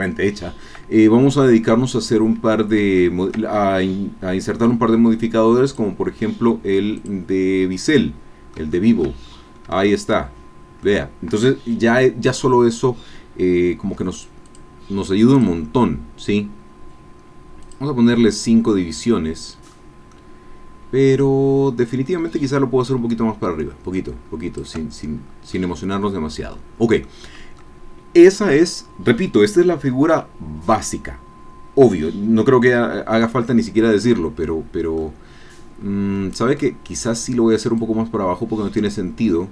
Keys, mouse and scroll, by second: 0.9-1.2 scroll down 1, 1.5-1.9 scroll up 1, 2.5 scroll down 1, 3.0 shift+click, 5.6 click, 7.0 click, 7.9 click, 8.7 shift+click, 9.3-9.7 shift+scroll up 1, 9.9-10.9 shift+drag, 14.1 click, 14.5 click, 15.3 click, 17.6 click, 18.2-19.8 middle drag, 20.1-21.4 middle drag, 21.6-22.0 scroll up 2, 22.8-24.8 drag, 25.2 scroll down 2, 25.6-26.7 drag, 26.7 scroll down 2, 27.1 click, 32.9-33.2 scroll down 2, 33.3-35.1 drag, 35.8-36.4 scroll up 2, 36.6 click, 37.8-39.5 drag.